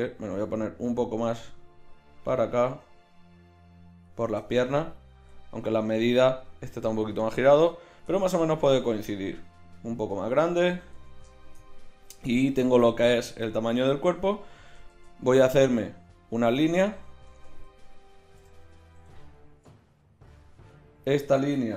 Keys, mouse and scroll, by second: 5.1 z, 8.1 Tab, 8.7 s, 11.0 Tab, 12.1 z, 13.9 z, 14.9 shift+a, 17.3 Tab, 18.3 g, 20.2-21.7 right drag.